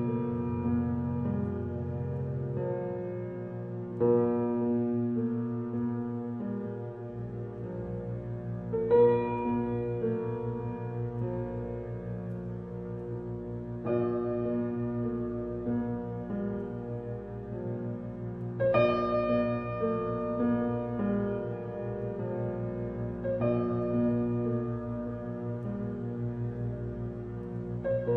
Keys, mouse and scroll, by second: 0.5 click, 0.7-2.4 drag, 2.4 s, 4.3 click, 5.6-6.1 scroll up 2, 6.1-9.1 middle drag, 10.0 shift+click, 13.7 click, 14.5 alt+h, 15.1-15.6 scroll down 1, 15.6 a, 16.8 Tab, 17.2 a, 17.8-18.8 middle drag, 18.8 KP_1, 19.3-20.1 scroll up 3, 20.1-21.3 shift+middle drag, 21.3 g, 27.3 Tab, 27.6-28.1 middle drag.